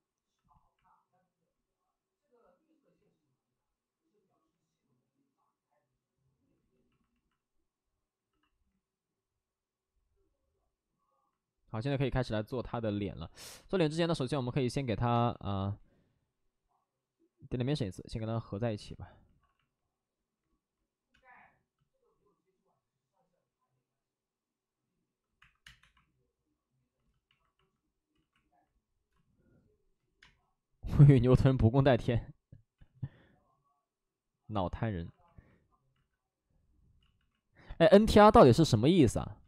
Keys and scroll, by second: 0.3 c, 12.8 alt+s, 15.1 space, 18.8 alt+s, 19.3 alt+s, 21.1 space, 25.3 1, 25.6 space, 26.8 1, 28.1 ctrl+z, 29.0 space, 31.1 ctrl+z, 31.1 space, 32.7 ctrl+z, 34.9 alt+s, 35.9 alt+s, 36.9 ctrl+z, 37.1 ctrl+z.